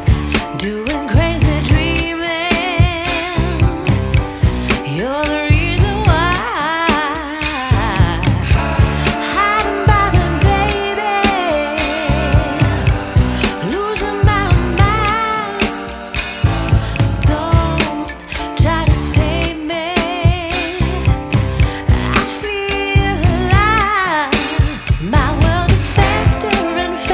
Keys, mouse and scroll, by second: 1.2 click, 2.9 click, 3.4 click, 6.7 click, 8.1 click, 11.7 ctrl+shift+click, 22.6-22.9 scroll up 3, 23.2-25.3 scroll down 3, 25.3 scroll up 1, 25.9 scroll down 1.